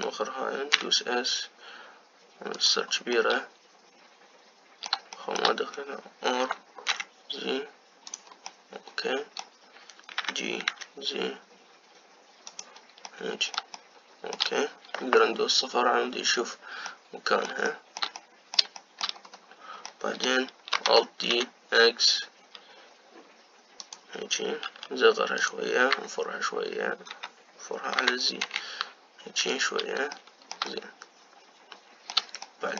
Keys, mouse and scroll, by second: 0.6 middle click, 1.6 s, 4.0-6.4 middle drag, 6.4-7.3 scroll up 1, 7.3 r, 9.3-11.0 middle drag, 11.0 g, 13.9-15.8 middle drag, 15.8 KP_0, 17.7-19.9 middle drag, 19.9-20.7 scroll up 4, 20.7-21.7 middle drag, 21.7 alt+d, 25.5 s, 26.8 r, 28.8 r, 31.0-32.7 shift+middle drag.